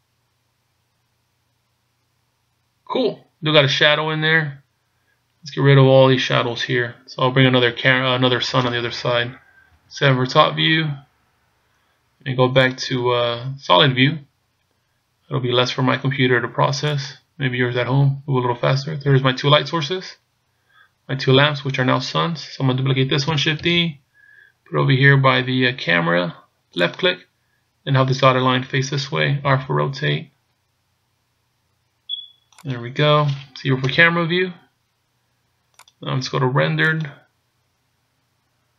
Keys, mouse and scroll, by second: 10.1 KP_7, 14.5 click, 23.8 shift+d, 29.5 r, 33.9 KP_0, 35.8 click, 37.4 click.